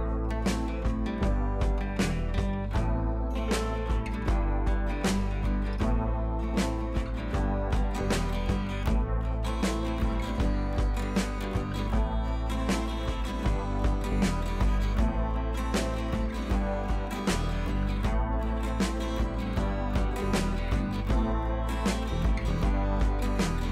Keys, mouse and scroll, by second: 2.7-3.1 scroll down 1, 3.1 scroll up 1, 4.1-4.7 click, 5.3 scroll up 1, 5.8 b, 6.1 click, 6.5 click, 8.8 scroll down 1, 10.1 scroll up 1, 10.9-12.2 alt+drag, 17.5-18.5 alt+click, 18.5 scroll down 1, 19.1 scroll up 1, 19.4-21.7 drag.